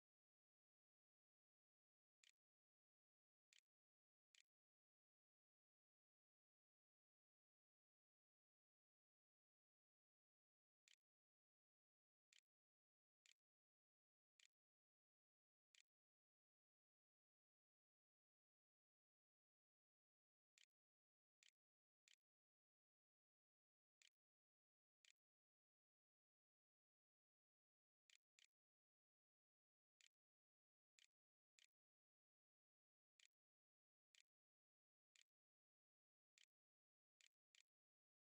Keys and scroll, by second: 1.1-3.1 typing, 3.8 ctrl+z, 3.9 ctrl+s, 9.7-16.9 typing, 19.4-20.5 typing, 21.7 Return, 22.0-31.6 typing, 33.0 Tab, 33.2-37.3 typing.